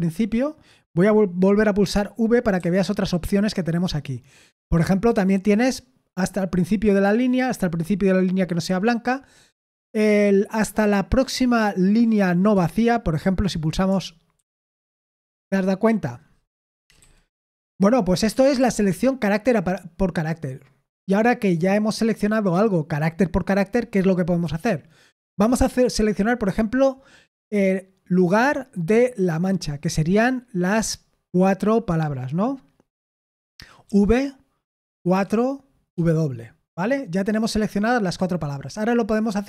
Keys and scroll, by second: 2.5 v, 14.3 shift+], 16.4 Escape, 16.8 typing, 18.3-19.5 typing, 33.8 v, 35.1 4, 35.9 w.